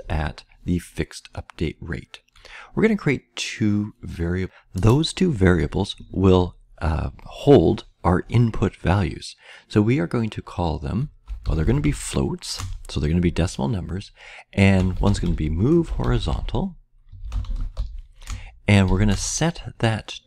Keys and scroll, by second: 10.9-12.2 typing, 14.5-18.8 typing.